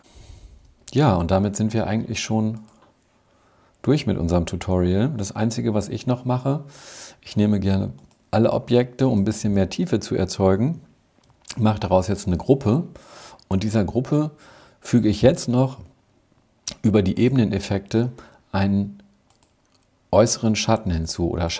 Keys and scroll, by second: 11.1 super+g.